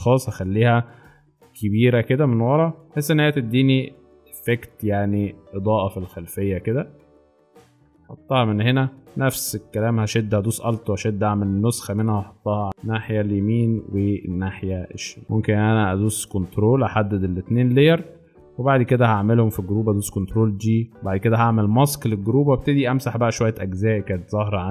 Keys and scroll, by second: 0.9 ctrl+t, 3.6 ctrl+alt+Return, 6.9 space, 20.0 ctrl+g, 23.1 b.